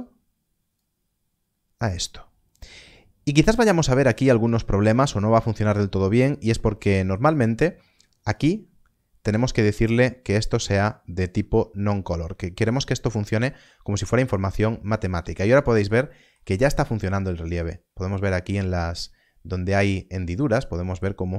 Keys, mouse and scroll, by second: 4.8 click, 4.9 middle click, 6.0 scroll up 1, 6.7 middle click, 8.3 click, 11.9 click, 14.8 click, 15.8 middle click, 21.1-21.3 scroll down 1.